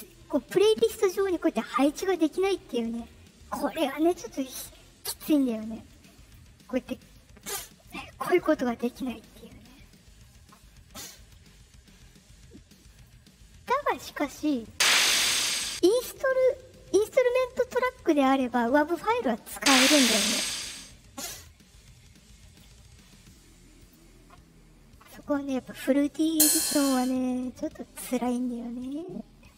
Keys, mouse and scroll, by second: 0.0 click, 5.8 shift+click, 6.8 click, 7.3 click, 9.1 right click, 9.8 right click, 11.1 right click, 12.9 click, 14.6-15.6 drag, 18.7 click, 19.5 click, 21.1 click, 22.4 right click, 23.7 click, 26.2 click.